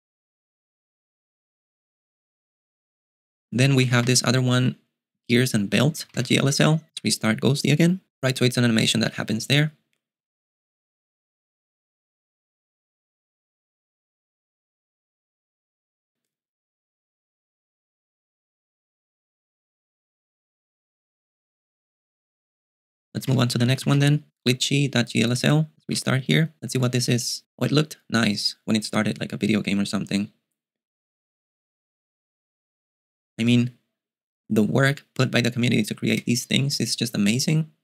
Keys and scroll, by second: 3.5-6.7 typing, 7.1 super+q, 22.8-24.5 typing, 26.1 super+q.